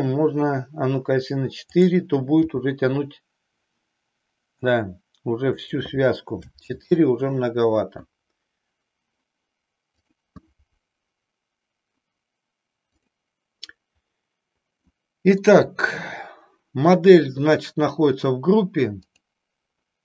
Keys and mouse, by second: 1.6-3.3 drag, 3.5 g, 5.6 click, 6.6 ctrl+z, 10.0 click, 14.8 middle click, 19.0 click.